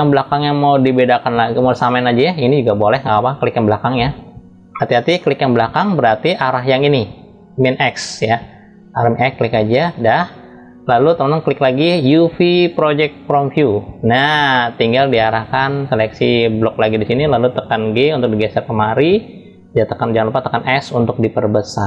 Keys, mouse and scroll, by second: 1.7 click, 4.0 click, 4.4 middle click, 9.1 click, 11.7-13.2 drag, 14.1 middle click, 14.6 middle click, 15.8-17.1 drag, 17.5 g.